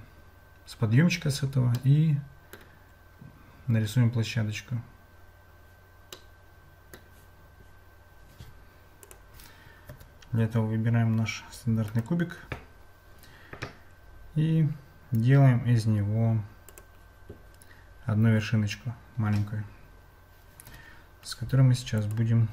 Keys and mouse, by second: 1.9 middle click, 6.2 middle click, 9.0 click, 10.6 Tab, 12.0-16.9 right drag, 20.9 `.